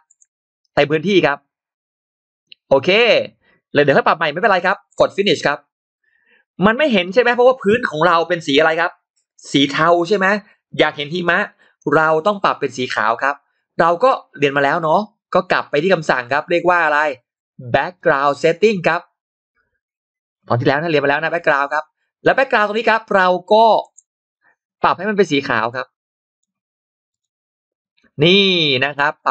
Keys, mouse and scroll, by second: 4.8 click, 6.0-6.9 scroll down 2, 6.9 click, 6.9-7.2 scroll up 1, 17.8 click, 20.5 click, 23.7 click, 25.6 click, 27.0 click, 28.1-28.9 scroll down 2, 28.9 middle click, 29.1 click.